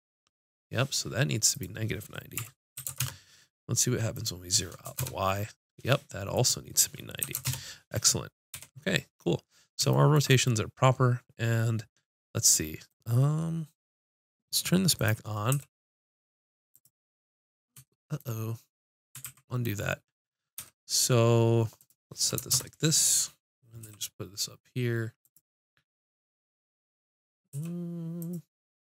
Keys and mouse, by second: 1.5-3.4 drag, 4.1-6.0 drag, 7.4-8.6 drag, 8.6 n, 9.3 middle click, 15.0 click, 15.5 g, 17.1-18.6 drag, 19.3 ctrl+z, 20.6 n, 22.4-23.6 drag, 23.8 g, 27.0 click, 27.5 g.